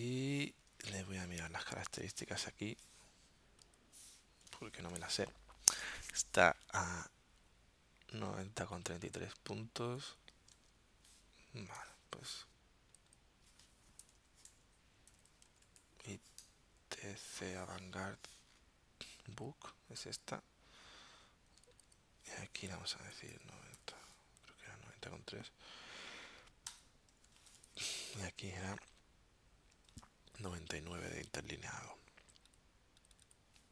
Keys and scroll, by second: 0.5 super+Tab, 4.7 super+t, 10.5 super+Tab, 14.2-16.4 typing, 23.2-24.5 typing, 26.7 Return, 27.4 super+Tab, 29.9 super+Tab.